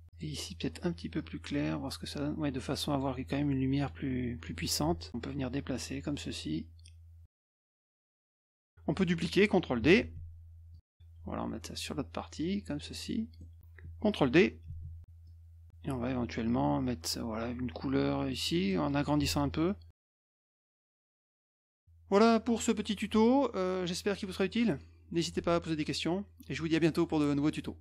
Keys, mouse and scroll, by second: 1.1 click, 2.2-4.0 drag, 4.5 middle click, 5.1 F1, 5.4-9.2 drag, 10.1 ctrl+d, 10.8-13.6 drag, 13.6-14.1 middle drag, 15.7 ctrl+d, 16.2-19.4 drag, 19.7 middle click, 19.7 scroll up 1, 19.9-21.1 drag, 21.6-22.0 middle drag, 21.6-22.0 scroll down 1.